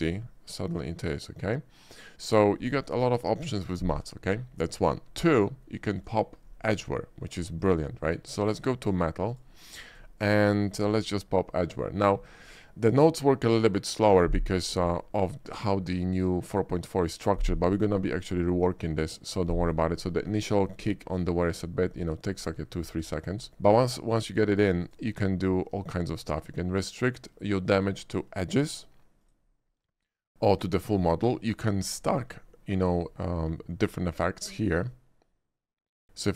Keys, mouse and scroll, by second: 0.3-2.5 shift+middle drag, 6.0 click, 7.7 click, 8.5 click, 9.0 click, 9.3 click, 9.9 click, 10.7 shift+middle click, 11.7 shift+click, 19.9 middle click, 20.2 shift+middle click, 20.5 shift+middle click, 21.4 shift+middle click, 22.4 shift+middle drag, 23.1 shift+middle click, 23.5 shift+middle click, 24.9 shift+click, 27.8 click, 29.3 click, 30.6 click, 30.9 click, 32.0 shift+click, 32.9 shift+middle click, 34.6 shift+click.